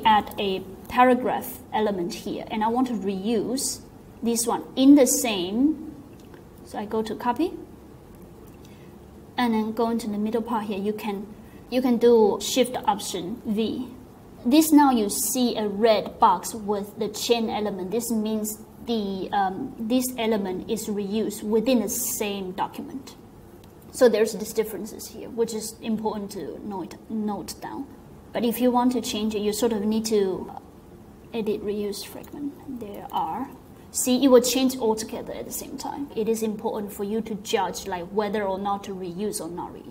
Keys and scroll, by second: 0.0-0.9 typing, 13.4 alt+shift+v, 27.8 super+s, 27.9-28.6 BackSpace, 32.0-33.6 typing.